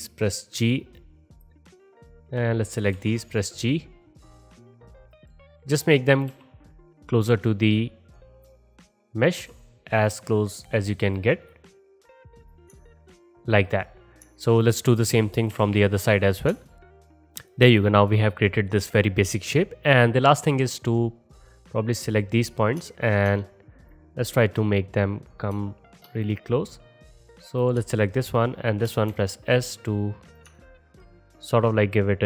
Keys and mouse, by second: 1.5 middle click, 2.3-5.2 drag, 3.0 g, 5.2 middle click, 5.7-8.5 drag, 6.4 g, 8.5 middle click, 8.8-11.3 drag, 9.4 g, 11.3 middle click, 11.8 click, 11.8 g, 12.7 middle drag, 15.6 KP_7, 16.7 alt+shift+middle click, 16.8 click, 16.8-17.1 typing, 16.8 middle click, 16.9 click, 16.9 middle click, 17.0 click, 17.0 middle click, 17.1 click, 17.2-17.9 alt+middle drag, 21.4-23.3 drag, 23.9-26.3 drag, 29.1 s.